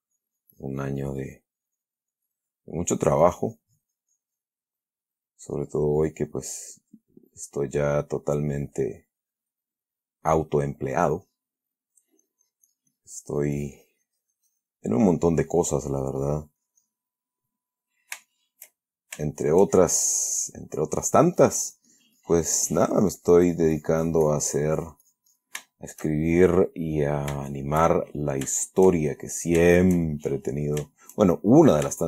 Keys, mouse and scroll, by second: 2.9 middle click, 3.5-4.9 drag, 5.0-5.6 middle drag, 5.8-7.5 drag, 7.5-8.1 middle drag, 8.4-10.0 drag, 10.0-10.9 middle drag, 11.1 middle click, 12.3-15.2 drag, 15.2-15.7 middle drag, 15.9-17.4 drag, 17.5-18.3 middle drag, 18.6-19.5 shift+middle drag, 19.6-20.5 shift+middle drag, 20.8 middle click, 21.8-25.9 drag, 26.0-26.5 shift+middle drag, 26.7 shift+middle click, 27.6-28.8 shift+middle drag, 29.7 middle click, 30.0-32.0 shift+middle drag.